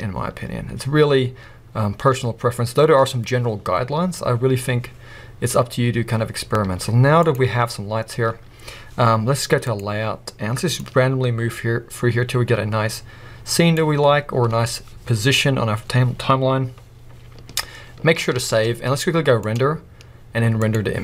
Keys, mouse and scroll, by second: 7.4 z, 7.9 scroll up 1, 8.2 scroll down 1, 9.7 click, 10.8-21.0 drag, 14.0-15.4 scroll up 2, 15.4-16.8 scroll up 1.